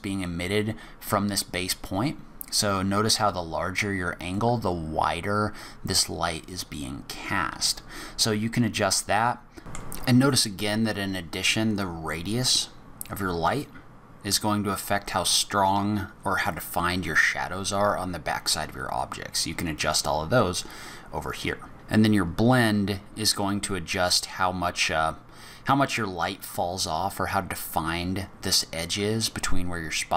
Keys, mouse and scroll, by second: 3.2 click, 8.6 click.